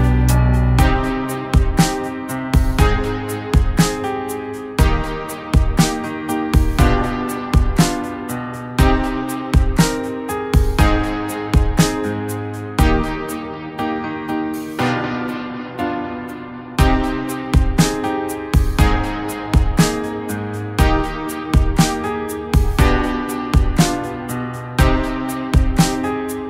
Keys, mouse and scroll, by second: 1.7 click, 3.9 click, 8.4-11.7 drag, 25.5 click.